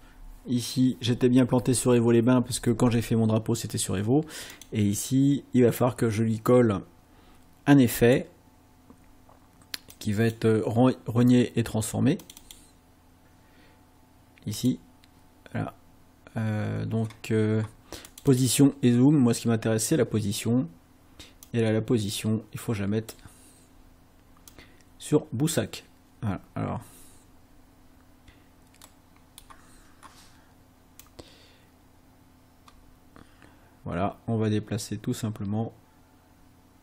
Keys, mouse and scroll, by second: 4.5 click, 8.0 click, 9.9 click, 12.3 click, 14.6 click, 18.1 click, 21.5-23.3 drag, 24.5-25.7 drag, 28.8 middle click, 31.1-36.8 drag.